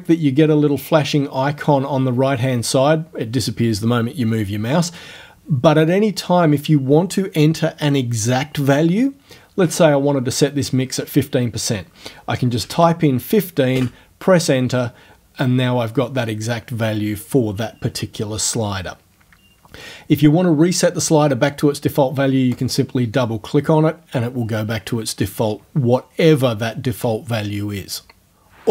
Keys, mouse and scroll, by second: 12.7 KP_1, 13.8 KP_Enter, 22.6 click.